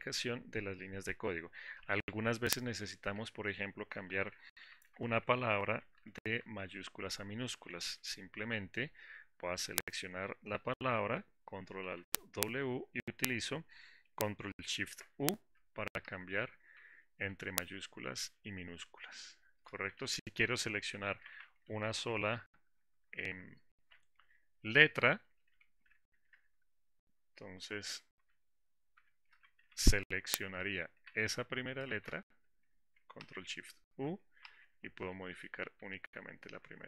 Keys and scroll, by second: 12.0 ctrl+alt+w, 15.2 ctrl+shift+u, 23.9 ctrl+shift+w, 28.4 ctrl+shift+u, 33.6 ctrl+shift+u.